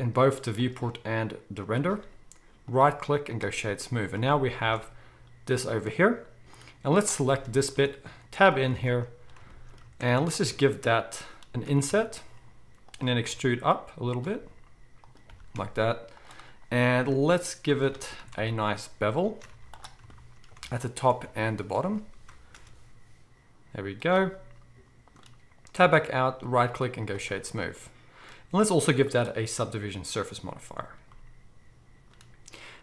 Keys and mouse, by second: 2.7-7.0 middle drag, 2.7-4.2 right drag, 4.6 alt+a, 7.0 right click, 7.2 shift+drag, 7.4-8.0 right drag, 7.7 Tab, 8.0-14.3 drag, 8.7 alt+a, 10.2 alt+shift+middle click, 10.2 alt+shift+right click, 11.7 e, 13.2 e, 14.3-17.7 right drag, 14.3 s, 15.3 g, 17.7 alt+middle click, 17.9 alt+a, 18.4-20.0 alt+shift+right drag, 19.5 z, 20.0-21.7 shift+drag, 20.8 alt+shift+middle click, 20.8 alt+shift+right click, 21.2 z, 21.7-22.5 right drag, 22.5 ctrl+b, 22.5-24.3 ctrl+drag, 24.3-29.1 right drag, 25.8 Tab, 29.1-32.8 middle drag.